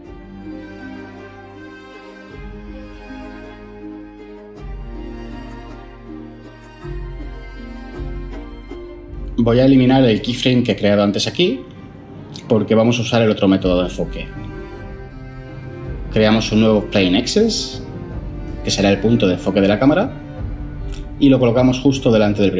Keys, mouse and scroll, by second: 16.2 shift+a.